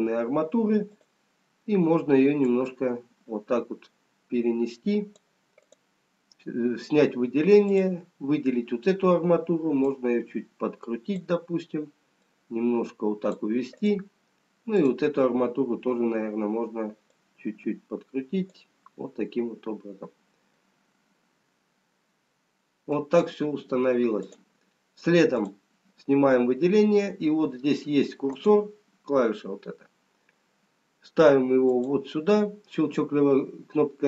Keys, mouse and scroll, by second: 0.8 click, 2.7 click, 12.3 click, 13.8 click, 17.5 click, 20.6 middle click, 24.4 click, 25.4 click, 28.4 click, 31.7 click.